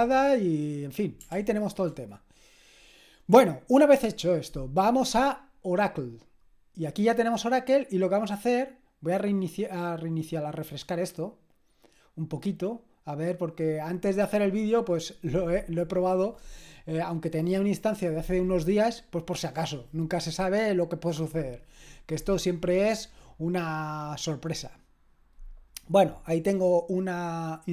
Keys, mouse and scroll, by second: 1.3 ctrl+l, 6.0 click, 9.0 click.